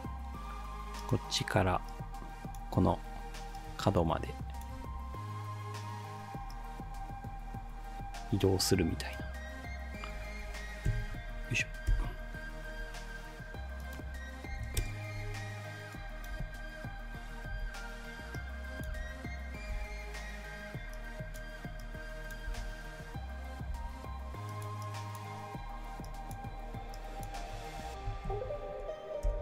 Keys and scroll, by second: 4.8 ctrl+z, 10.9 F9, 11.9 ctrl+shift+k, 14.3-15.1 typing, 16.4 space, 17.5 space, 19.0 space, 22.5 space, 23.7 space, 28.3 F9, 29.3 ctrl+shift+k.